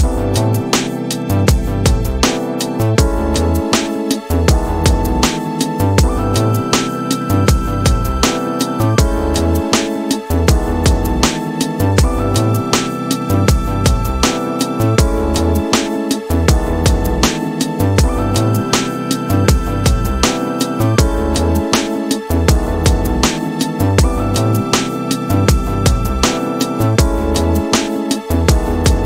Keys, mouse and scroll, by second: 1.5-4.7 drag, 6.2-15.6 drag, 16.5-20.4 right drag, 23.9-29.0 drag.